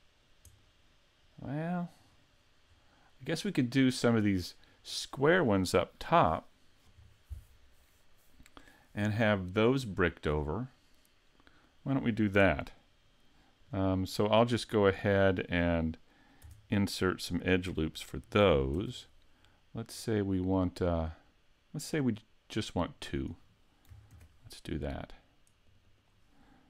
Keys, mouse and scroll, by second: 0.6 middle click, 2.7-3.2 scroll down 2, 3.2 middle click, 13.6 right click, 14.1 right click, 16.5 Tab, 17.7 a, 18.8 ctrl+r, 23.3 click, 24.1 ctrl+r, 26.0 click.